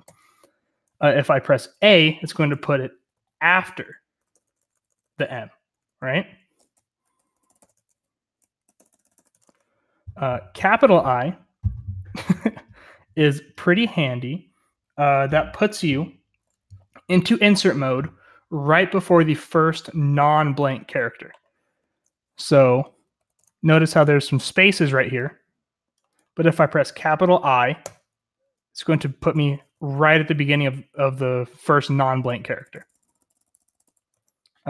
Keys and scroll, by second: 0.0 l, 3.1-5.6 typing, 6.7-9.1 typing, 7.7 Escape, 9.2 Escape, 22.7-23.3 typing, 28.9-30.7 typing, 32.4-33.8 typing, 34.1 Escape.